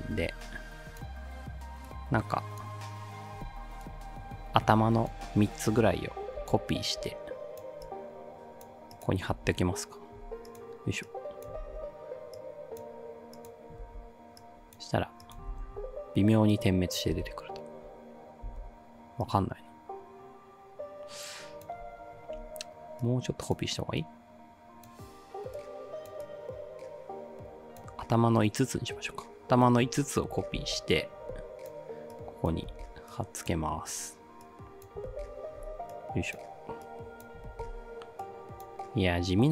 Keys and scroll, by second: 6.4 ctrl+c, 9.3 ctrl+v, 11.7 ctrl+v, 13.9 ctrl+v, 15.5 ctrl+v, 17.2 space, 18.5 space, 30.6 ctrl+c, 32.7 ctrl+v, 35.1 ctrl+v, 37.5 ctrl+v.